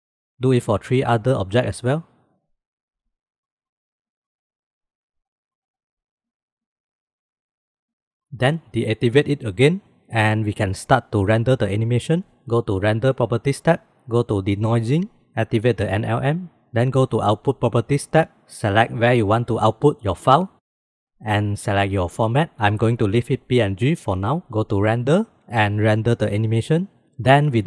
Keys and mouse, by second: 0.3 click, 1.7-2.8 drag, 3.5 click, 4.5-5.3 drag, 5.8 click, 7.0-8.0 drag, 9.7 click, 14.8 click, 16.2 click, 18.0 click, 25.4-27.0 drag, 27.0 ctrl+s.